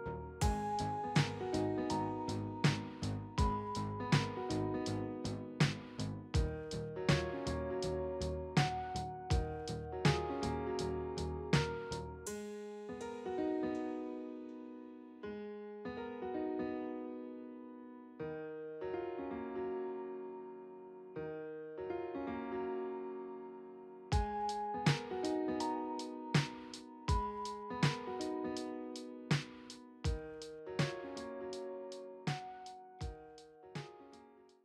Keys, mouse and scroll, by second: 14.5 middle click, 20.4 double click, 20.6 right click, 28.5 right click, 33.6 right click.